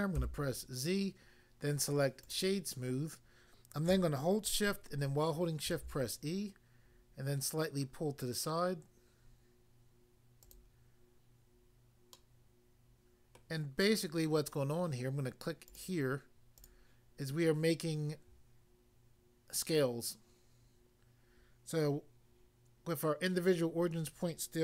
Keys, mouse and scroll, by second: 0.2 z, 2.2 click, 5.7 e, 10.5 click, 10.6 click, 12.2 middle click, 13.3 middle click, 15.7 click, 15.8 click, 16.6 click, 17.3 scroll up 1, 18.0 scroll down 1.